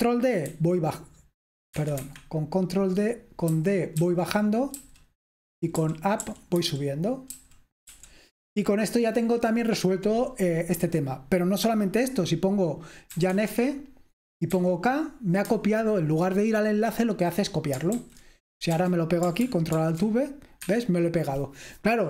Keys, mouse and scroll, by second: 0.5 ctrl+d, 1.9 Escape, 2.1 Escape, 3.6-7.9 typing, 13.0-14.8 typing, 18.1 super+h, 19.7 ctrl+alt+v, 19.7 BackSpace, 20.7 Escape.